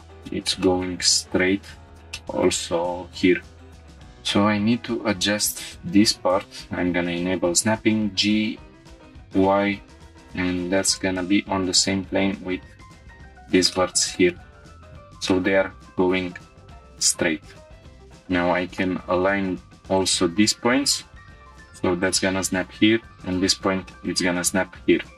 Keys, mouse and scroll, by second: 0.3 shift+middle click, 0.6 middle click, 1.6-1.9 scroll up 2, 2.1 shift+middle click, 3.5 scroll down 1, 3.8 shift+middle click, 3.8 click, 3.8 1, 6.4-7.9 drag, 7.9 g, 9.4 y, 10.2 click, 12.1 g, 12.3 y, 13.0-13.4 drag, 13.4 scroll down 1, 13.7 middle click, 14.3-14.6 shift+middle drag, 14.8 Tab, 14.9-15.5 scroll down 2, 15.3 middle click, 15.8 shift+middle click, 16.3 scroll down 1, 17.4-17.9 scroll up 4, 17.8 Tab, 17.8 shift+middle click, 17.8 click, 18.8-19.5 middle drag, 19.9-21.3 drag, 21.3 g, 21.4 drag, 22.3 g, 23.1-23.5 drag, 23.5 scroll down 1, 23.9 middle click.